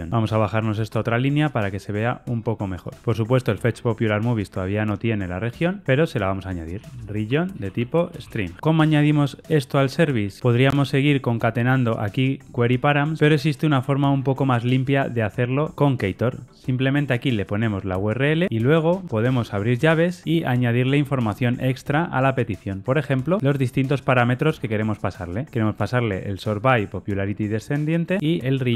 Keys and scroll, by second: 4.8 super+b, 8.5 Escape, 23.1 Tab.